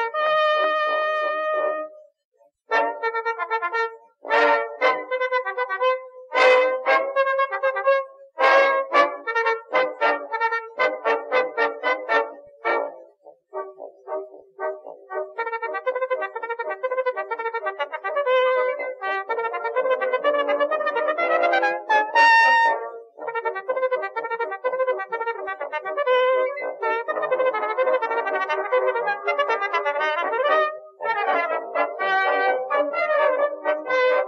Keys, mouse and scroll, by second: 0.2 middle click, 0.8 middle click, 1.2 middle click, 1.4 middle click, 1.8 KP_3, 2.2 g, 3.0 click, 3.3 middle click, 5.5 middle click, 5.7 middle click, 6.2 middle click, 6.5 middle click, 6.8-8.0 right drag, 9.6-10.7 middle drag, 11.6 right click, 12.2 g, 13.5 click, 14.5 ctrl+r, 16.4 middle click, 16.8 KP_7, 17.6 ctrl+r, 20.4 middle click, 20.6-22.7 drag, 22.7 middle click, 22.8 click, 23.6 click, 24.1 e, 25.5 KP_3, 26.4 z, 27.0 g, 28.6 z, 29.8 ctrl+r, 30.8 ctrl+r, 32.0 click, 32.4 ctrl+r, 33.5 ctrl+r.